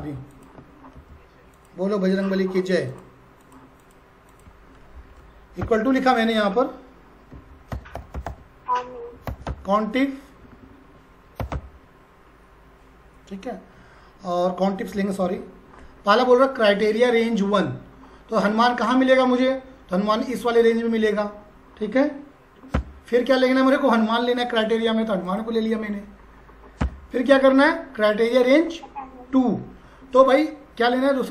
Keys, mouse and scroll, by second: 13.4-14.9 typing, 20.8 click, 25.3 click.